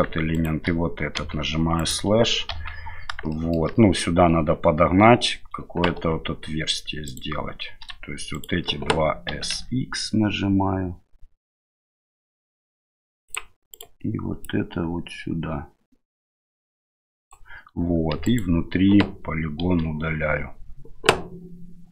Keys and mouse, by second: 0.3 shift+right click, 1.2 KP_Divide, 1.8 right click, 2.5 KP_7, 3.3 shift+middle drag, 6.0 Tab, 7.1 right click, 8.3 right click, 9.3 s, 13.7 right click, 14.4-17.3 drag, 18.1 3, 18.3 right click, 19.6 Delete.